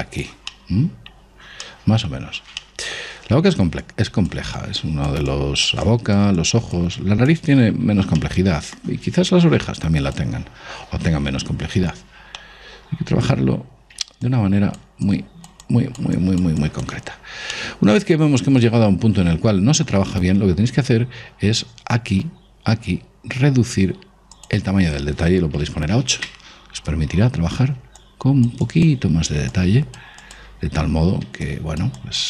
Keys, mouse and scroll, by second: 1.1-5.1 middle drag, 4.4-9.4 drag, 8.7-10.4 middle drag, 10.2 click, 11.7 ctrl+z, 12.4-14.8 middle drag, 14.8-19.0 drag, 18.1-19.8 middle drag, 22.4-24.9 middle drag, 24.9 click, 28.5-32.2 drag.